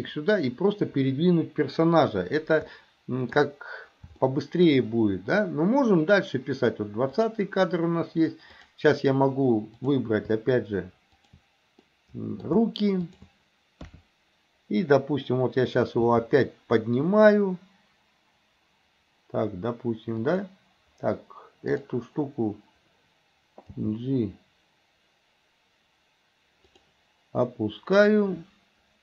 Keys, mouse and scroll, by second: 2.8-3.4 shift+middle drag, 4.3 shift+middle click, 7.2 click, 8.7 click, 9.8 click, 11.2 shift+click, 11.9-12.5 middle drag, 13.1 shift+click, 13.8 KP_3, 16.1 g, 21.7 click, 23.8 g.